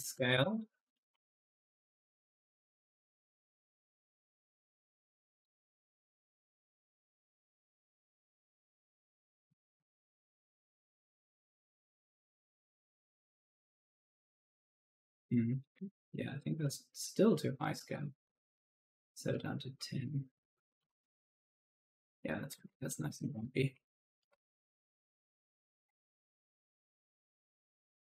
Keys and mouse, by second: 0.0-1.8 typing, 0.2 Return, 0.8 right click, 1.7 click, 5.1 right click, 5.2 d, 5.7 click, 6.6-8.2 typing, 6.7 right click, 8.9 right click, 9.4 click, 11.8 click, 13.3 click, 14.8 right click, 15.1 s, 16.0 ctrl+z, 16.8 click, 18.1 1, 18.5 9, 19.9 BackSpace, 20.4 0, 20.7 Return, 21.2 click, 22.1 right click, 22.3 ctrl+z, 22.6-24.2 typing, 22.7 right click, 24.8 click, 25.4-28.1 typing, 27.2 right click, 27.8 right click.